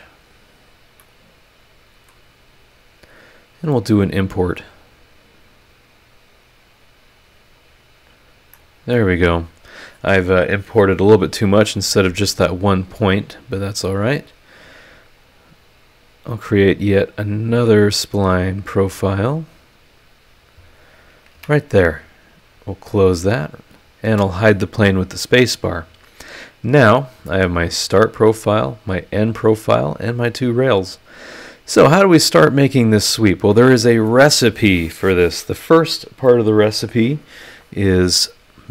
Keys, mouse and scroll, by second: 0.6-0.9 scroll up 2, 1.0-2.3 middle drag, 1.1 click, 3.6 click, 5.5 click, 7.1 click, 8.2 scroll up 2, 8.5 click, 8.6 right click, 14.3 click, 14.6-16.2 middle drag, 16.2 click, 16.5 middle click, 16.8 click, 17.0 middle click, 17.1 click, 17.5 click, 17.8 middle click, 17.9 click, 18.3 click, 20.4 click, 21.3 Escape, 22.4 click, 23.7 click, 24.1 space, 25.4-26.2 scroll down 3, 26.6 scroll up 2.